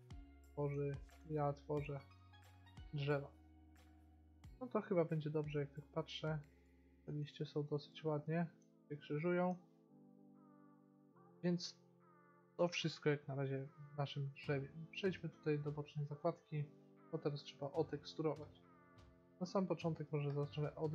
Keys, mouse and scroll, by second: 5.3-6.4 middle drag, 6.9 middle click, 7.5 middle click, 7.7 middle click, 9.6-10.6 middle drag, 12.8 t, 15.7-17.0 drag, 17.0-19.0 middle drag, 19.0-20.5 drag.